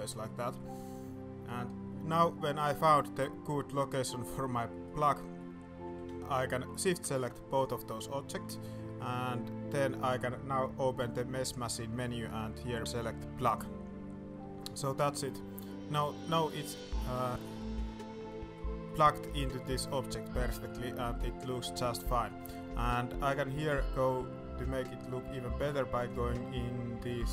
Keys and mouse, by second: 0.0 middle click, 0.4 shift+middle click, 3.1 s, 4.5 middle drag, 4.8-5.3 middle drag, 5.8 g, 6.1 middle click, 7.5 shift+click, 8.1 middle drag, 8.8 middle click, 11.6 y, 14.7-15.0 middle drag, 15.3 middle drag, 16.4 middle drag, 17.0 middle drag, 17.4 shift+middle drag, 17.9-18.5 middle drag, 18.8 middle drag, 19.5 middle click, 20.3-20.6 middle drag, 20.8 middle drag, 21.4-22.2 middle drag, 22.3 middle drag.